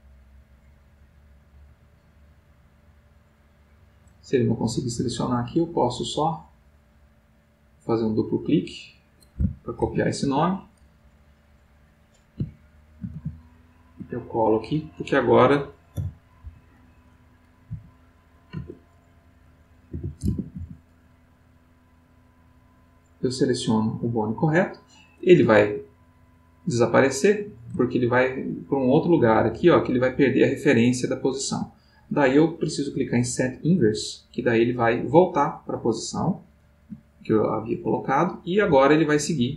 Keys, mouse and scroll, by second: 4.6 Escape, 5.8 click, 7.4 click, 8.4 click, 9.8 ctrl+c, 10.2 ctrl+Escape, 11.4 click, 13.1 ctrl+v, 14.4 ctrl+click, 15.9 i, 16.4 k, 17.7 ., 18.5 BackSpace, 19.7-21.1 typing, 22.9 click, 25.4-27.4 ctrl+middle drag, 28.4-32.2 ctrl+middle drag, 33.1 click, 34.3-37.4 middle drag, 37.6 click, 38.9 g.